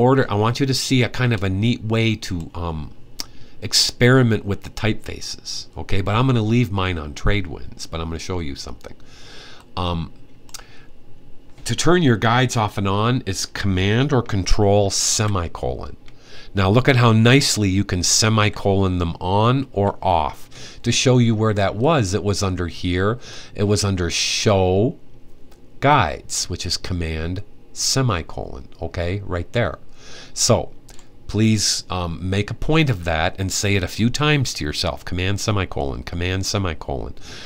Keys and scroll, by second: 14.9 super+;, 17.0 ;, 18.1 typing, 19.5 typing.